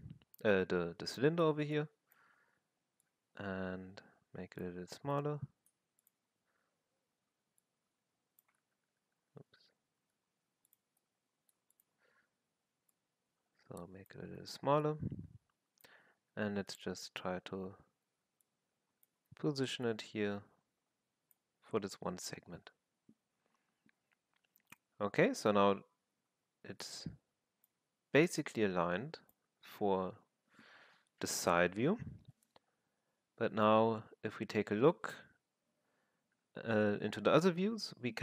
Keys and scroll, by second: 6.5 r, 8.6-10.0 typing, 14.3 w, 16.0 r, 17.6 w, 19.1 w, 26.1 r, 27.7 w.